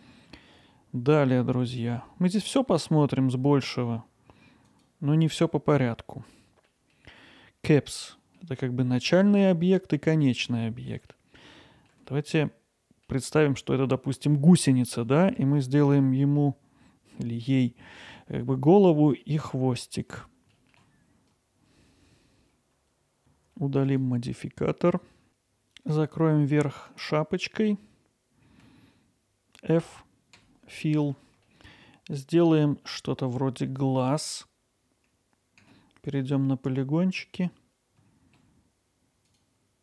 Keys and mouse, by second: 4.7-6.9 drag, 8.2 middle click, 9.8 middle click, 11.2-11.9 alt+middle drag, 19.4-19.8 middle drag, 20.7 shift+s, 20.8 shift+d, 22.0 x, 23.9 click, 30.4 f, 32.4 middle click, 35.6 3, 36.1-38.0 drag, 39.3 click.